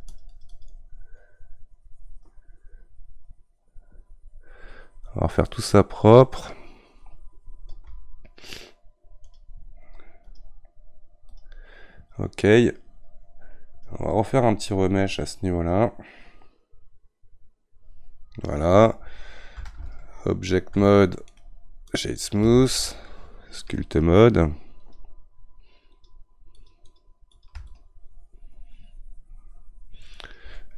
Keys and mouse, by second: 10.2-16.8 drag, 20.8 ctrl+Tab, 22.0 right click, 22.9 ctrl+Tab, 24.8-30.7 drag.